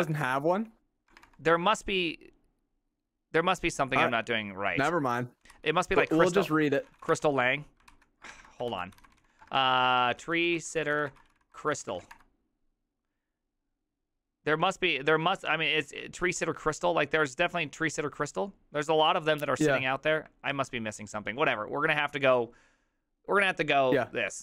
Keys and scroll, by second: 0.0-1.9 typing, 5.5 ctrl+c, 6.1-7.6 typing, 6.2 Up, 7.9 ctrl+c, 8.3 alt++, 8.7 ctrl+t, 8.7-12.6 typing, 14.6 typing, 20.6 alt+{.